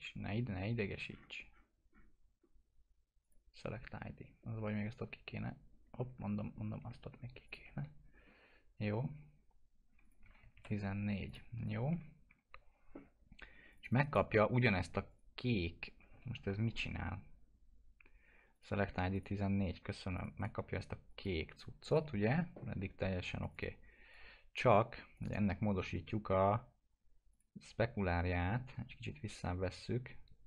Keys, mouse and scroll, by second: 1.0-2.6 scroll down 1, 3.2 click, 4.2 scroll up 1, 5.7-6.0 scroll down 1, 6.2-6.5 alt+scroll up 1, 7.5 ctrl+click, 7.9 scroll down 1, 10.0 click, 10.2 1, 11.2 click, 11.6 scroll up 1, 11.9 F4, 13.7 click, 14.0 right click, 15.1 click, 16.2 ctrl+z, 18.5 click, 18.7 1, 19.1 click, 20.4 right click, 21.1 click, 22.2 F4, 23.4 click.